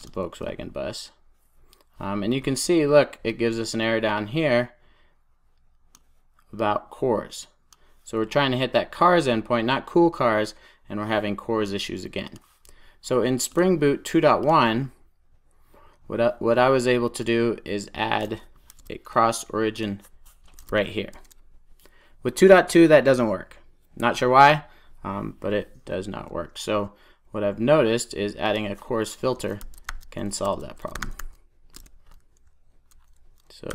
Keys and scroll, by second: 18.6 super+c, 21.0 super+s, 32.0 Return.